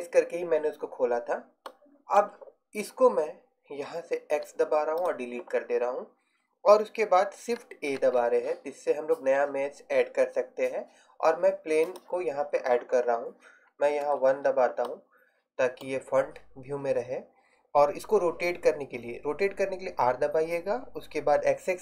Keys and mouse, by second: 1.7-4.4 middle drag, 4.4 x, 8.0 shift+a, 14.1 KP_1, 20.1 r.